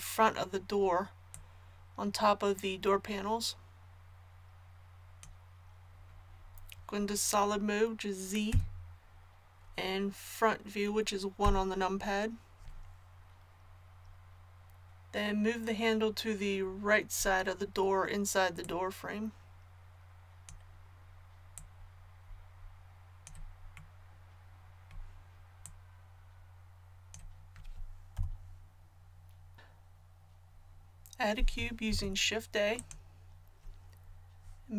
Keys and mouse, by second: 1.3-5.2 drag, 8.5 z, 11.4 KP_1, 18.6-24.5 drag, 25.6-27.6 drag, 28.1 KP_1, 31.9 shift+a.